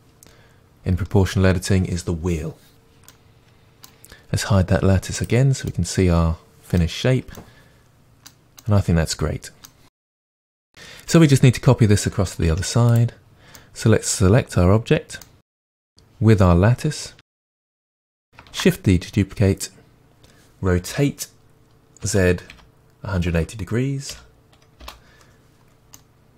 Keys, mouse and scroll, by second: 5.2 click, 5.7-13.0 middle drag, 7.0-7.4 scroll down 2, 12.5 Tab, 13.0 click, 13.6-15.9 middle drag, 15.9-17.2 drag, 18.5 shift+d, 26.0-26.3 middle drag.